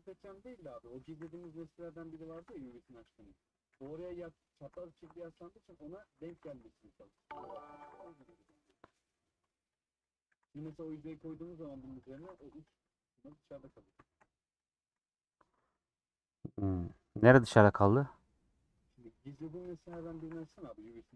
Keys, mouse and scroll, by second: 2.2 x, 2.5 2, 2.6-3.7 drag, 3.7 e, 4.9 shift+Tab, 6.3 g, 7.2 click, 7.7 e, 8.5 middle click, 9.7 click, 10.3 e, 10.9 middle click, 11.3 scroll up 2, 11.6 middle click, 12.0 click, 12.1 e, 12.8-14.6 middle drag, 14.6 click, 14.8 e, 15.7-19.3 middle drag, 19.3 scroll up 2, 19.7 shift+middle click, 20.2 i, 20.3 click, 20.8 g.